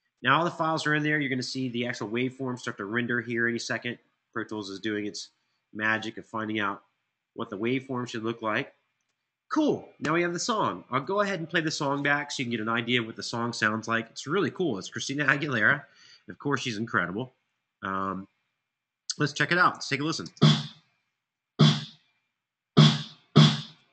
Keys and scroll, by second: 19.4 Return, 19.9 space.